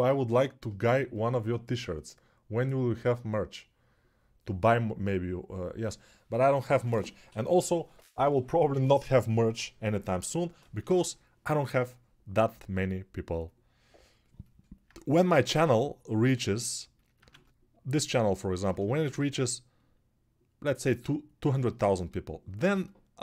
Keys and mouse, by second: 12.3 g, 17.1 ctrl+z.